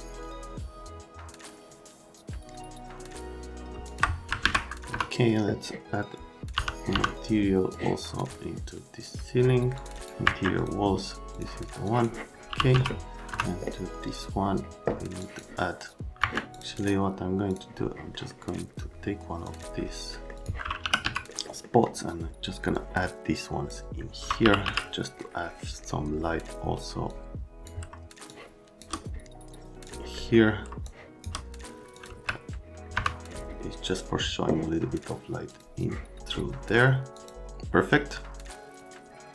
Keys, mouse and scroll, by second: 3.8 click, 4.4 alt+q, 4.9 F3, 6.5 n, 6.9 n, 7.7 click, 9.7 click, 9.9 right click, 10.2 Escape, 10.5 click, 11.3 click, 11.8 click, 12.2-13.2 typing, 13.3 F3, 15.2 click, 16.2 Escape, 16.5 click, 16.7 right click, 17.4 click, 18.1 middle click, 19.4 click, 20.1 right click, 20.3 click, 20.6-21.5 typing, 21.3 middle click, 21.4 middle click, 22.7 click, 24.1-25.1 typing, 27.1 middle click, 27.2 click, 28.3 shift+click, 29.8 click, 30.2 right click, 30.9 shift+click, 31.9 click, 32.1 z, 32.9 F3, 35.5 click, 37.1 click.